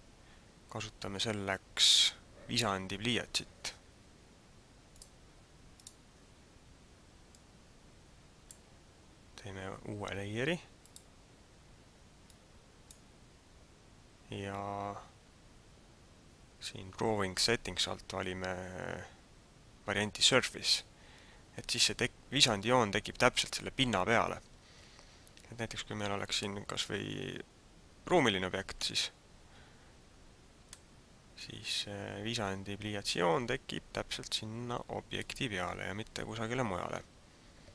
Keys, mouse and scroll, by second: 5.0 click, 7.2 click, 10.8 click, 12.2 click, 20.6 click, 26.3 middle click, 30.7 middle click.